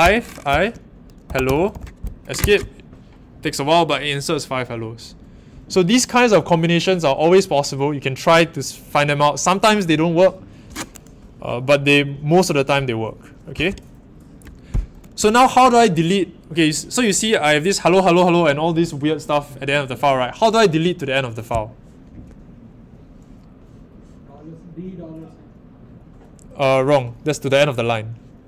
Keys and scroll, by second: 0.0-2.1 typing, 2.3 Escape.